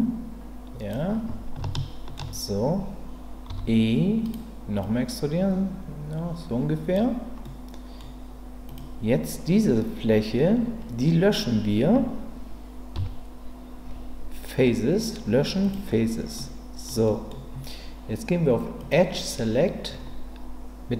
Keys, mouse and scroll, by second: 1.7 shift+middle click, 3.5 e, 4.8-6.9 drag, 7.4 middle click, 8.6 click, 12.9 Delete, 16.3 middle click, 17.0 middle click, 18.8 click.